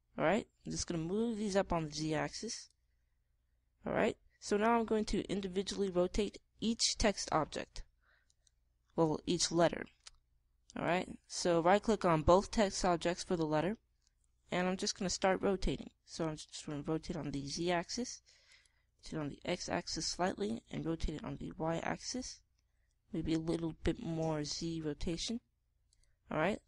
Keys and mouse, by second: 1.5-3.3 drag, 9.2-10.9 drag, 11.6-13.5 drag, 17.1 r, 19.5-21.2 drag, 19.8 r, 21.4 r, 25.4 r.